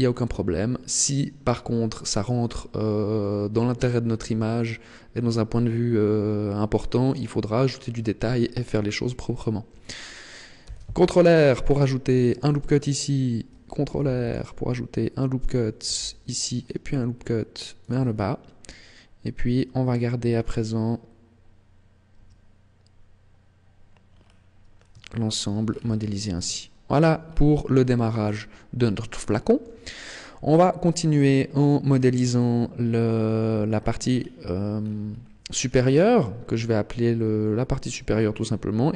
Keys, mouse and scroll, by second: 7.7-9.6 scroll up 2, 10.6 ctrl+r, 12.3 click, 13.9 ctrl+r, 15.5 click, 15.9 ctrl+r, 17.9 click, 22.1 Tab, 24.1 scroll down 6, 25.0 shift+middle click, 25.6-26.1 scroll down 2, 26.5 shift+middle click, 27.2 scroll up 2, 27.7 shift+middle click, 28.3 scroll up 2, 29.1 shift+middle click, 29.9 scroll up 2, 31.8-32.2 scroll down 2, 33.7-34.7 scroll down 6, 34.7-35.3 scroll up 8, 35.7 scroll down 2.